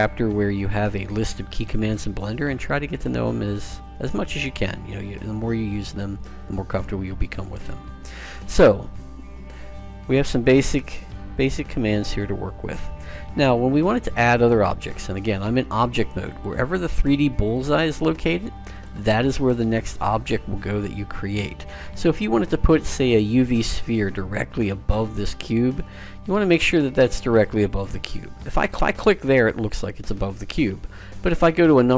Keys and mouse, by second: 16.5-21.8 drag, 27.9 click, 31.5 KP_7.